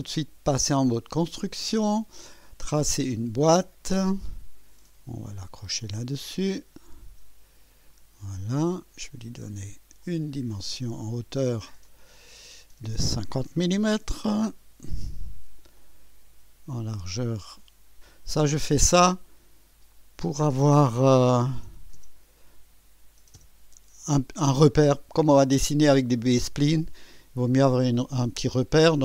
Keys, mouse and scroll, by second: 1.0 click, 2.6 click, 3.2 right click, 6.5 click, 7.9 click, 8.4 right click, 10.0 click, 11.8 click, 13.5 KP_5, 13.7 KP_0, 14.1 Return, 15.7-16.5 drag, 16.5 typing, 18.0 click, 19.9 click, 21.6 3, 21.9 0, 23.3 Return, 23.5 typing, 25.1-26.6 drag.